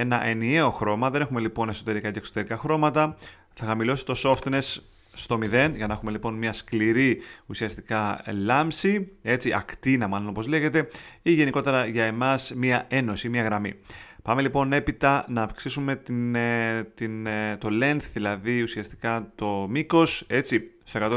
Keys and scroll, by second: 5.1 0, 5.4 Home.